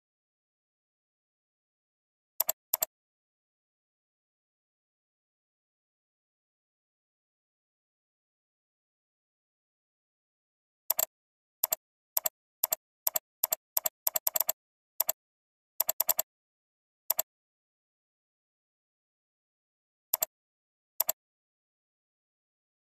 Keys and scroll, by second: 18.1 ctrl+h.